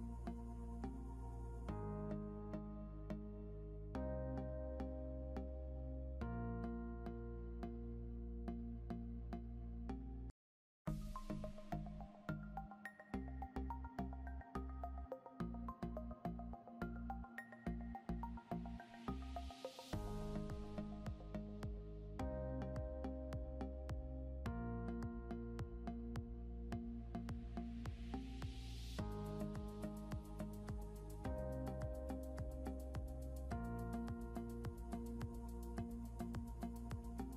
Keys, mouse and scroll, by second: 9.9 click, 10.8 scroll down 1, 12.9 scroll up 1, 13.3 click, 13.8 scroll up 1, 14.2 click, 17.4 click, 27.7 click, 34.0 scroll down 1, 35.0 click.